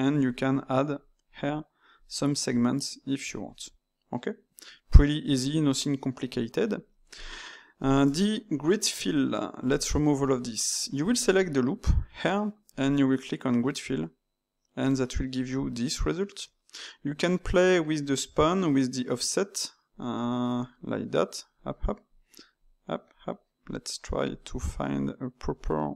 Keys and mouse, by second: 0.2-4.9 drag, 4.9-6.3 middle drag, 6.3 Tab, 7.1 click, 7.7 ctrl+shift+click, 8.9 x, 10.3 Tab, 11.1 alt+click, 13.8-16.8 drag, 19.9-25.9 drag.